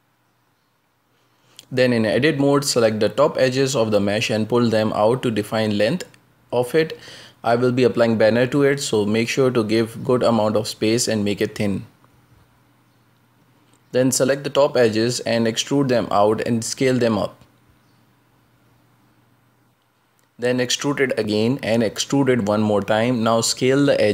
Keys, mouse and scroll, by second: 0.7 Tab, 1.1 right click, 2.0-2.7 scroll down 9, 2.9 shift+middle click, 3.5 g, 4.8 middle click, 5.7-7.9 scroll up 6, 6.0 shift+middle click, 6.7 shift+middle click, 7.9 a, 8.2-8.9 scroll down 2, 9.0 s, 10.0 s, 14.4 a, 14.5 a, 14.6 b, 15.7 e, 17.7 KP_Decimal, 18.1 scroll down 4, 18.7-19.3 middle drag, 19.3 z, 19.7 s, 20.9 middle click, 21.4 e, 22.7 shift+middle click, 23.6 e.